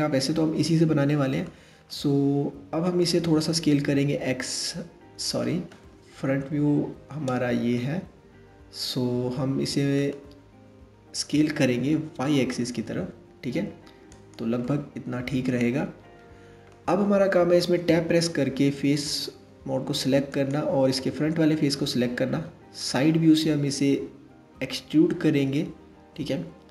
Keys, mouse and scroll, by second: 3.2 s, 5.8 KP_1, 7.4-10.5 middle drag, 10.9 s, 14.2-17.3 middle drag, 17.3 Tab, 18.7 click, 19.9 click, 21.9 KP_3, 24.3 e.